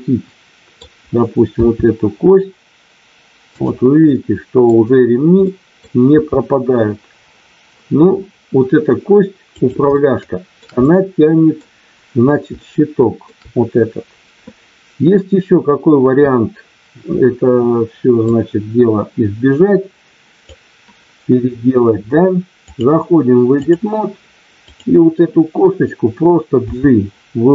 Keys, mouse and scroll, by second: 1.7 r, 3.5 click, 4.1 middle click, 5.4 middle click, 6.2 r, 9.6 click, 9.9 shift+middle click, 10.8 middle click, 12.7 shift+middle click, 18.2-20.4 drag, 22.6-23.8 drag, 24.7 click, 26.7 g.